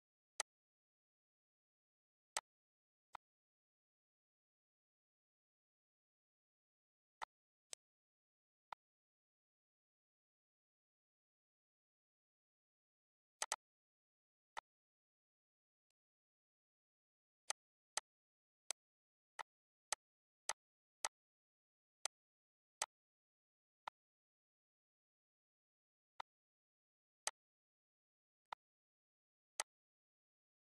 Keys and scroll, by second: 2.1 ctrl+s.